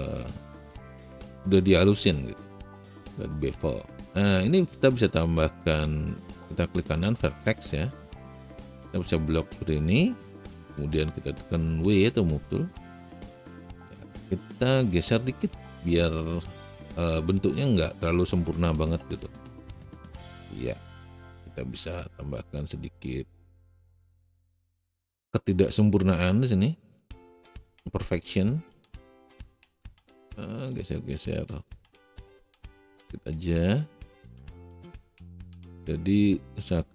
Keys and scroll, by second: 10.7 w, 16.0 a.